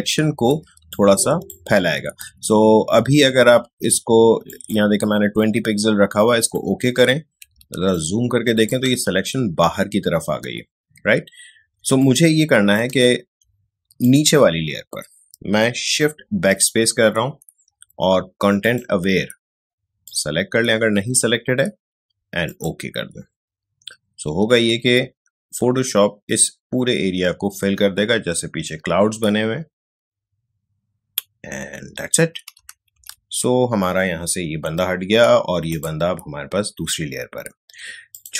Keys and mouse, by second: 0.6 ctrl+space, 0.9 ctrl+click, 1.1 ctrl+space, 7.5 click, 7.5 ctrl+space, 7.9 ctrl+click, 8.0 ctrl+space, 11.8 space, 12.0-14.0 ctrl+drag, 16.4 shift+BackSpace, 18.6 click, 22.4 click, 32.9 ctrl+d, 35.7 click, 38.1 click.